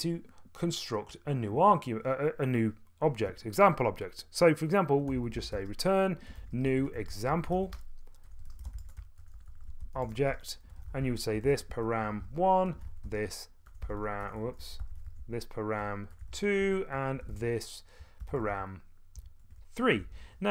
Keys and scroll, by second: 4.8-11.4 typing, 13.6-20.5 typing.